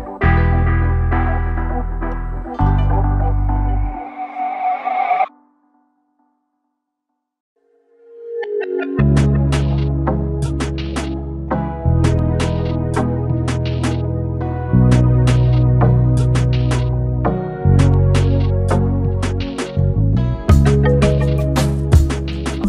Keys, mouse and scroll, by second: 1.9 Right, 2.9 shift+Right, 4.7 click, 5.7 shift+Right, 7.0 Left, 10.2 Down, 10.2 click, 11.0 ctrl+space, 11.1-12.2 ctrl+click, 11.3 ctrl+space, 12.2 space, 12.3-12.7 click, 12.6 space, 13.5-15.9 drag, 18.2-20.2 typing, 21.8 w.